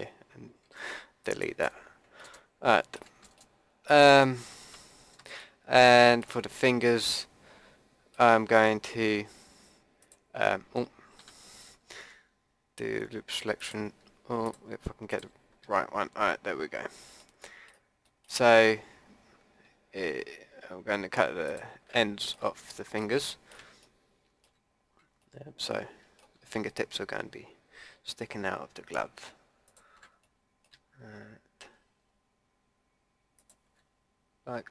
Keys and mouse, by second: 0.7 Delete, 10.0-17.2 drag, 11.2 a, 21.4 click, 22.0 middle click, 22.1 click, 23.0 middle click, 29.7 click, 30.2-33.4 middle drag, 34.3 click.